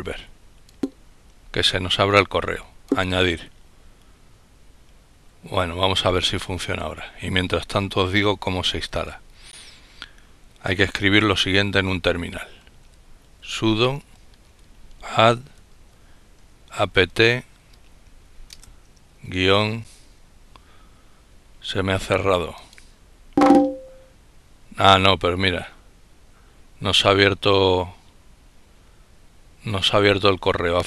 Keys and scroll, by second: 11.8-16.4 typing, 18.3 typing.